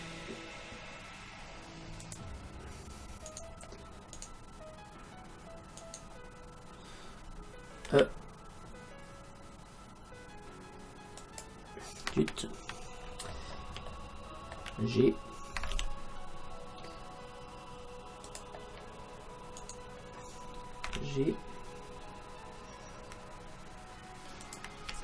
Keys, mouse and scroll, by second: 3.3-5.2 right drag, 5.8-7.6 right drag, 7.7 right click, 7.9 e, 13.1-15.6 middle drag, 15.8 g, 18.4-20.1 drag, 19.6-21.3 right drag, 20.9 g, 24.6-25.0 drag.